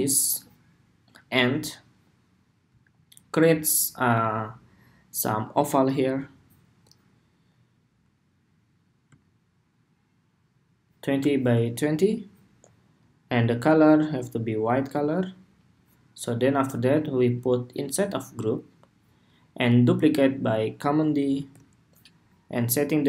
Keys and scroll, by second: 21.0 super+d.